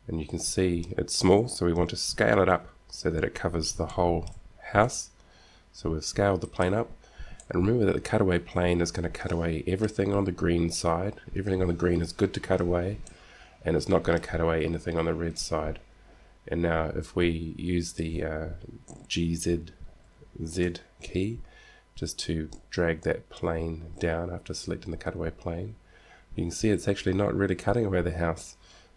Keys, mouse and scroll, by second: 2.9 KP_7, 3.7-4.1 scroll down 1, 5.1 s, 7.7 middle click, 8.5-9.7 middle drag, 13.3 middle click, 15.5 middle click, 17.0 middle click, 20.2 g.